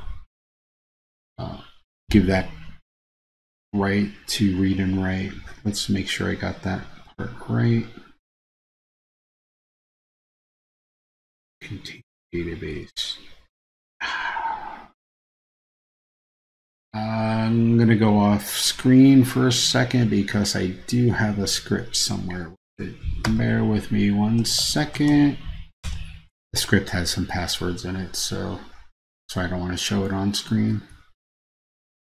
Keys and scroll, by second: 23.4 super+space.